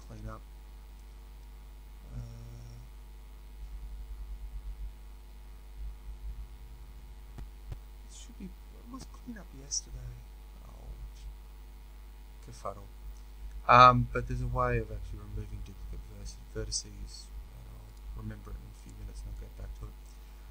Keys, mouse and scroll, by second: 18.8 click, 19.2-20.5 middle drag.